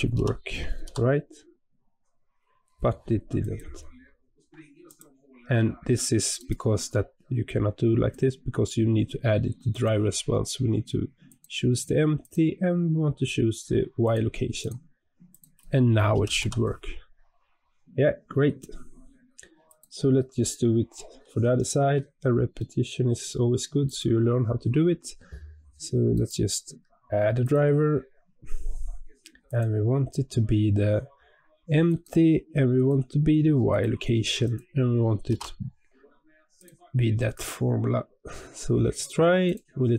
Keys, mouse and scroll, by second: 0.0 g, 4.8 click, 6.3-14.5 right drag, 14.5 click, 15.2 click, 16.0 g, 20.0-20.4 scroll down 2, 20.4-21.9 middle drag, 21.9-22.5 scroll up 3, 22.5-23.3 middle drag, 23.3-23.8 scroll up 1, 23.8 click, 26.0-38.5 right drag, 38.5-39.3 scroll down 3, 39.3 click.